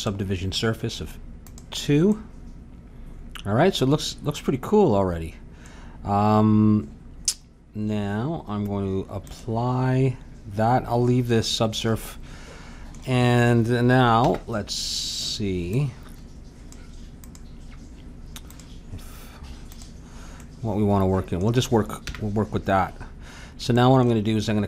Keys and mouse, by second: 1.5-3.7 drag, 2.1-3.7 right drag, 3.7 middle click, 9.2-11.1 drag, 11.8-14.2 middle drag, 14.2 n, 15.7-20.4 drag, 20.4-24.6 middle drag, 22.0 n.